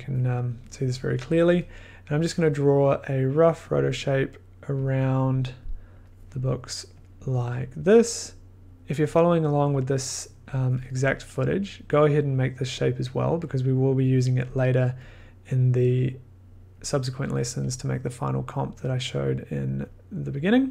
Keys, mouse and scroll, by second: 0.0 middle click, 0.8 scroll, 3.7 click, 5.0 click, 5.3 click, 6.3 click, 6.5 click, 6.9 click, 7.4 click, 7.7 click, 8.2 click, 8.5 click, 9.1 click, 9.7 click, 10.5 click, 11.7 click, 12.4 click, 14.0 click, 15.9 click, 16.8 click, 17.3 click, 18.6 click, 19.0 click, 19.9 click, 20.4 click.